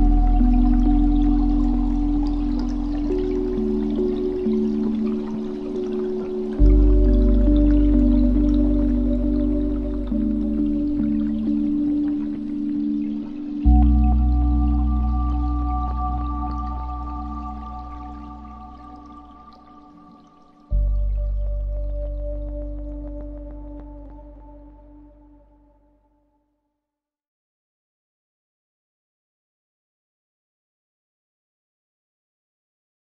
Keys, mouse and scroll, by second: 1.2 scroll down 7, 1.3 scroll up 1, 1.5-1.9 scroll down 5, 1.9 middle click, 2.7-3.0 scroll up 7, 3.0-4.2 middle drag, 4.2-10.0 drag, 10.0-11.0 scroll down 9, 11.0 KP_Decimal, 11.9-13.3 middle drag, 13.3 shift+a, 16.8 shift+a, 20.6-21.3 scroll up 2, 21.3 drag, 22.7-24.7 middle drag, 24.7-28.0 drag, 31.7 middle click, 32.3-33.0 scroll up 8.